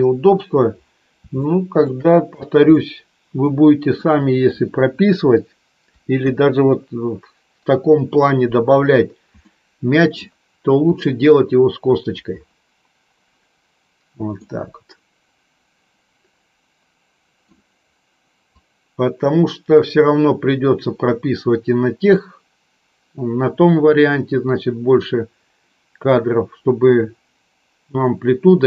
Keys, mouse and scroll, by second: 1.3 shift+middle click, 2.8 middle click, 4.0 middle click, 6.1 KP_4, 9.4 middle click, 14.3-17.4 middle drag, 18.8-28.6 drag.